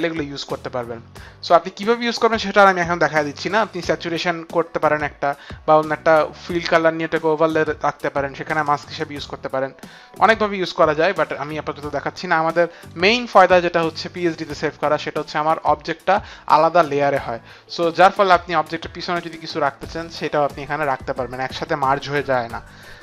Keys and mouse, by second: 11.5 ctrl+d, 14.9 click, 16.4 click, 16.9 click.